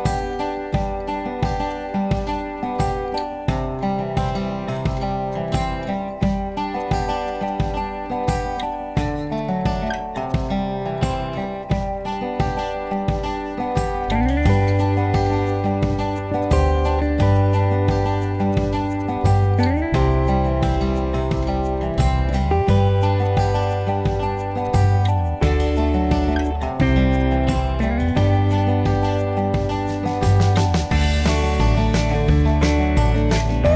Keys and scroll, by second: 4.4 s, 10.0 m, 18.1 Escape.